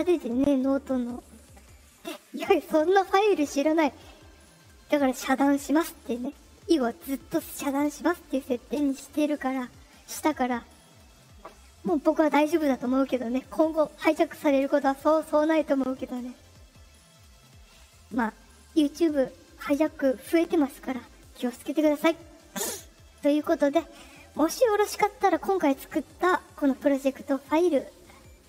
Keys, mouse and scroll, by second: 21.3 click.